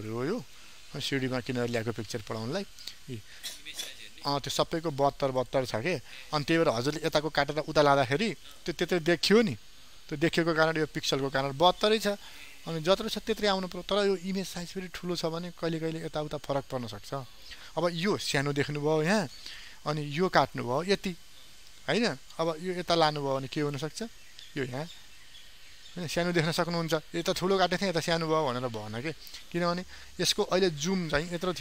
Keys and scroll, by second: 0.5 ctrl+d.